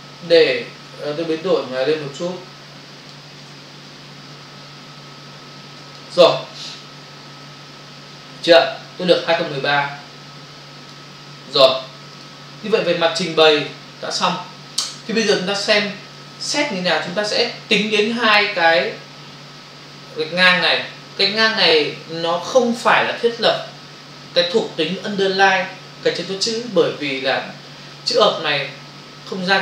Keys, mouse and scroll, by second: 2.0 shift+click, 3.8 shift+click, 7.0 Return, 9.6 click, 12.2 ctrl+click.